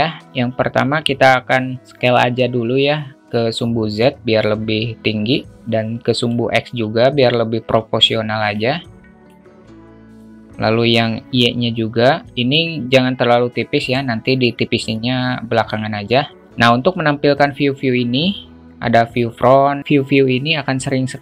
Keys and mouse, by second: 4.0-6.3 drag, 8.5-9.2 alt+middle drag, 10.2-13.9 drag, 16.9 `.